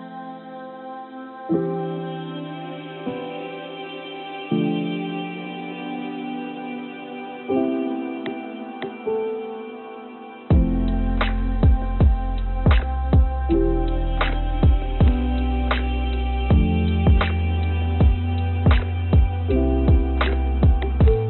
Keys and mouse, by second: 3.2 3, 3.5 click, 5.4 i, 6.2 click, 8.1 Tab, 11.1 click, 12.7 i, 14.0 click, 14.4 click, 15.0 click, 15.5 3, 15.7 click, 16.5 i, 19.5 click, 19.8 middle click, 20.8 e.